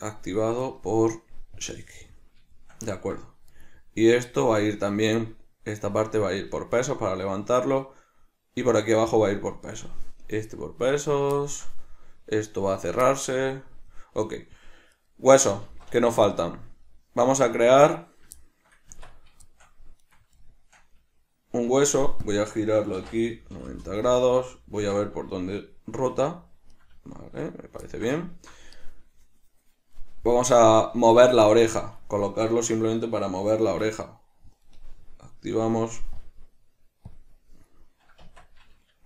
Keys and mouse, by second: 0.4 right click, 1.7-2.7 drag, 2.7-3.7 shift+middle drag, 3.7 right drag, 6.7-14.4 middle drag, 14.4 right click, 15.0 right click, 15.8 alt+q, 16.4-20.1 shift+middle drag, 19.0 Tab, 20.1 right click, 20.5-22.5 shift+middle drag, 22.0 shift+d, 22.5 click, 23.1 r, 24.9 Tab, 25.5 right click, 26.1 r, 27.0 right click, 27.3 Tab, 28.0-33.8 shift+middle drag, 33.8 Tab, 36.3 drag, 37.2-39.0 drag, 38.3 Tab.